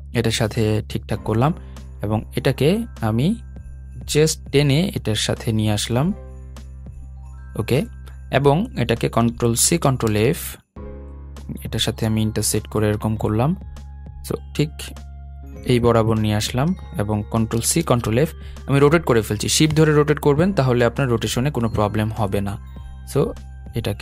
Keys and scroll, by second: 9.3 super+c, 9.6 super+f, 17.3 shift+super+c, 17.5 shift+super+f.